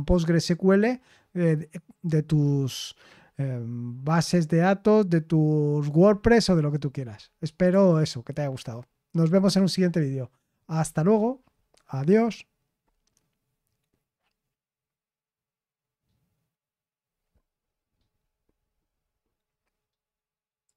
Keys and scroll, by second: 10.8 super+x.